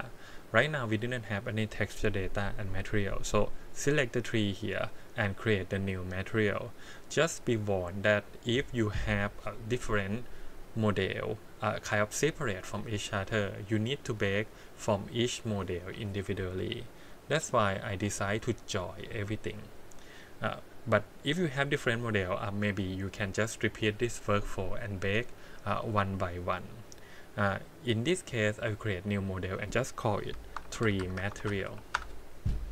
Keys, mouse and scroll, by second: 0.6 click, 14.0 click, 14.6 click, 15.1 click, 15.4 click, 15.8 click, 17.9 click, 20.5 click, 21.4 click, 28.8 click, 29.4-30.6 drag, 30.8-31.9 drag, 31.2 e.